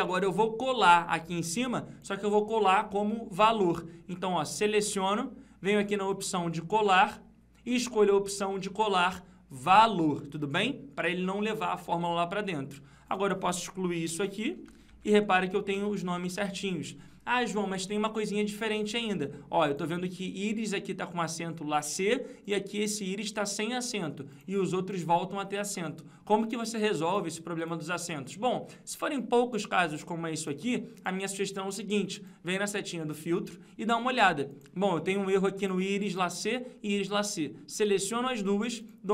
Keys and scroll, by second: 14.2 ctrl+-, 15.2 ctrl+Up.